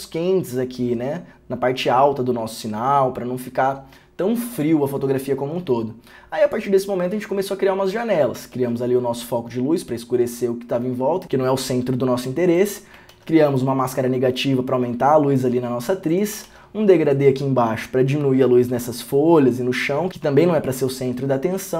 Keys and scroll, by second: 8.8 ctrl+d, 13.3 ctrl+d.